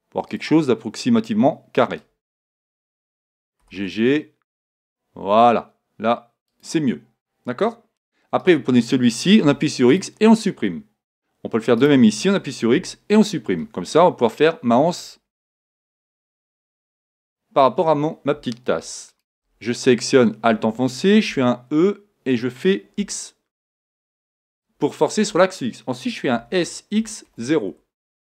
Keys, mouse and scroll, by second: 0.4-2.4 drag, 3.6 right click, 3.6 g, 6.6-8.3 drag, 8.5-10.2 right drag, 9.4 x, 11.8-13.7 right drag, 12.7 x, 14.0-15.8 middle drag, 15.5 KP_1, 19.1-20.9 right drag, 21.3 e, 26.2 click, 26.4 s.